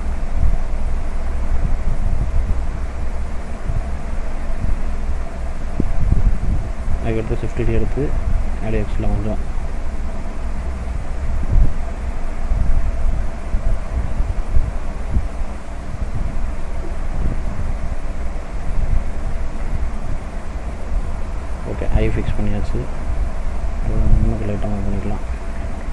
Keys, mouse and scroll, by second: 0.5 middle click, 2.2 click, 3.1 s, 5.4 click, 7.7 shift+d, 13.0 click, 13.5 middle click, 14.2 click, 15.2 click, 19.0 click, 19.6 middle click, 20.7-21.1 scroll down 3, 21.1 middle click, 21.6-22.1 scroll up 3, 22.1 middle click, 23.0 click, 24.2 shift+click, 25.3 click.